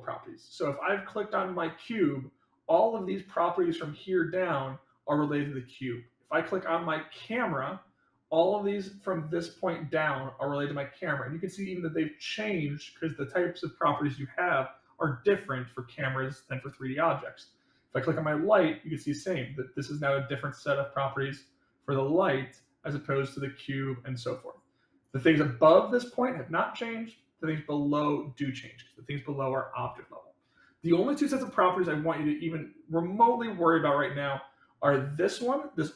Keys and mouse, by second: 7.3 click, 23.2 click, 24.2 click, 25.0 click.